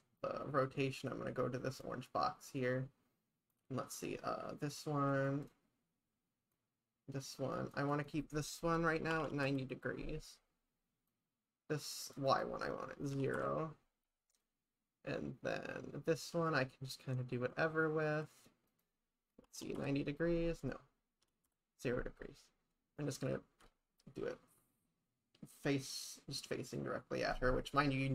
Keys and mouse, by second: 3.6-5.5 drag, 6.6-7.8 drag, 8.0-10.4 drag, 11.2 click, 12.4-14.2 drag, 14.5-18.5 drag, 18.8-22.2 drag.